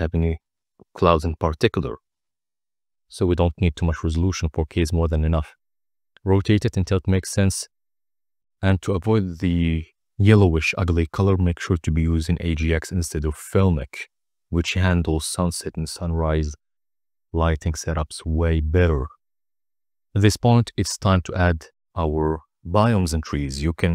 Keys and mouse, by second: 1.1 click, 1.9 ctrl+t, 2.5 middle click, 3.2-7.3 drag, 8.3 click, 8.9-9.3 drag, 11.9 t, 12.4-14.0 drag, 15.7 z, 16.2 middle drag, 16.8 click, 17.3-18.3 drag, 18.3 n, 18.6 ctrl+a, 23.3 click, 23.8 click.